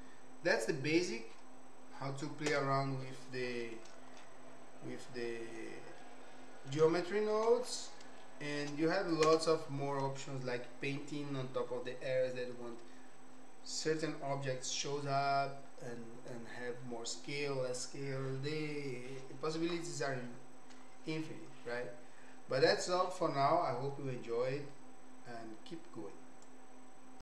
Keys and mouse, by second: 2.4 KP_0, 6.0 middle click, 7.1 shift+middle click, 8.2 shift+click, 9.2 KP_0.